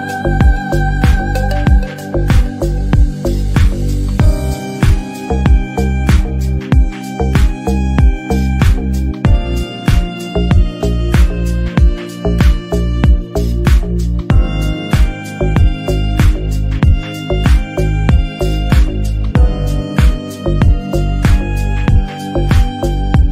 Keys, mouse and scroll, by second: 0.4-2.4 typing, 1.7 middle click, 2.1 shift+middle click, 2.2 scroll up 2, 3.6 ctrl+z, 3.7 ctrl+z, 4.0 r, 4.4-4.7 scroll up 3, 4.7 r, 5.2 scroll down 2, 5.3 shift+middle click, 5.5 s, 6.3 alt+z, 6.4 middle click, 6.6 scroll down 7, 6.9 shift+middle click, 7.0 scroll up 2, 7.1 click, 7.3 KP_1, 7.5 scroll down 1, 7.7 alt+z, 7.8 scroll up 1, 7.9 Tab, 8.1 click, 9.0 Delete, 9.4 alt+z, 9.5 middle click, 9.7-10.4 scroll down 3, 9.8 Tab, 10.0 drag, 10.6 scroll up 2, 10.7 middle click, 11.3 click, 11.4 Tab, 11.6 /, 11.8 ctrl+r, 12.4 scroll up 2, 12.5 scroll down 1, 12.6 s, 13.6 shift+middle click, 14.4-16.8 typing, 14.6 alt+z, 16.3 Tab, 16.4 click, 16.5 middle drag, 17.0 alt+z, 17.2 shift+middle click, 17.3-17.9 scroll up 1, 17.9 Tab, 18.0 a, 18.4 Tab, 18.7 shift+click, 19.1 ctrl+l, 19.6 click, 19.8 ctrl+a, 20.3 click, 21.3 middle click, 21.6 Tab, 21.7 a, 21.9 s, 22.7 g, 23.1 scroll down 2, 23.1 middle click.